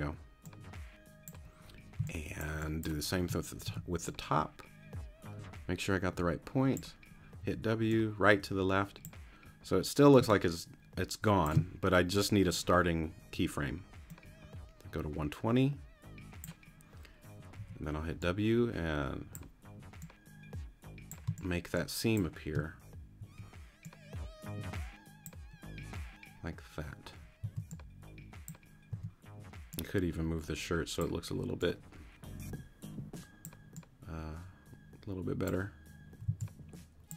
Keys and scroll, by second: 2.0 space, 3.7 t, 7.4 w, 10.2 space, 17.6 w, 21.3 space, 22.3 space, 23.2 w, 27.4 c, 28.9 t, 36.3 c.